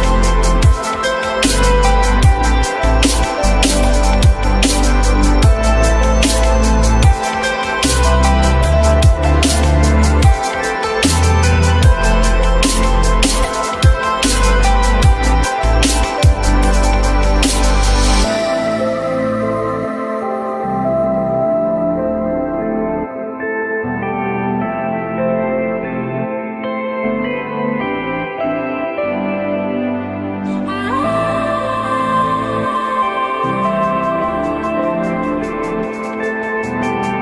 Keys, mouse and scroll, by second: 7.8 alt+middle click, 8.7 F3, 10.6-11.0 typing, 12.4 F3, 21.1 typing.